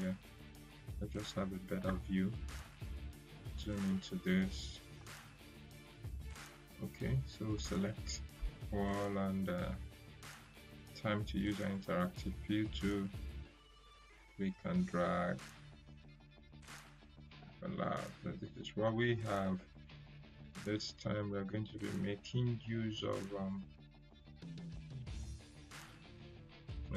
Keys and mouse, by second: 10.7-11.3 click, 14.1-16.9 shift+drag.